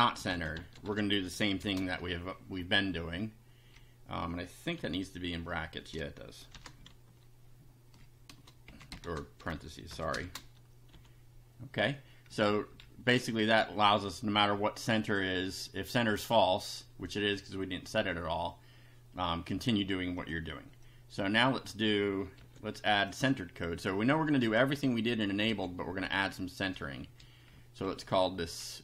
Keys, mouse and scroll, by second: 0.0-1.6 typing, 2.6 Left, 4.7 F5, 6.5 shift+9, 6.8 shift+Right, 8.7 Left, 9.1 shift+9, 9.9 BackSpace, 10.2 shift+0, 10.9 F5, 12.3 Down, 14.9 click, 20.2 click, 20.9-21.9 drag, 22.4 ctrl+c, 23.0 ctrl+click, 24.1 Up, 24.4 Return, 24.7 Up, 25.5 ctrl+v, 26.1 ctrl+Up, 27.5 Right.